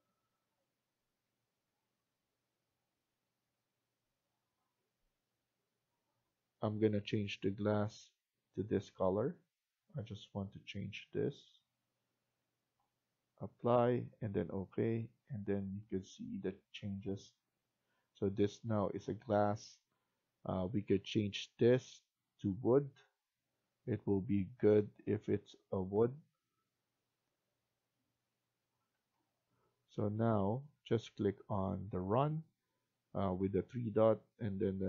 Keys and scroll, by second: 29.3 F1.